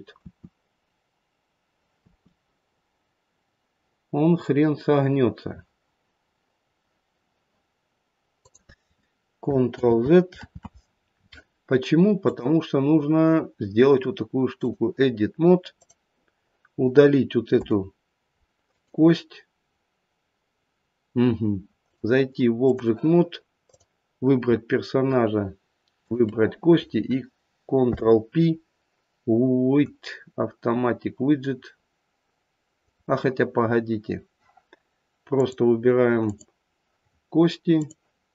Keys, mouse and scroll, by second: 0.2 e, 2.0 r, 9.8 ctrl+z, 10.4 ctrl+z, 12.2 click, 15.7 click, 17.5 Delete, 21.7 click, 23.6 click, 25.9 shift+click, 26.2 shift+click, 27.7 ctrl+p, 35.3 click, 36.2 click, 37.7 click.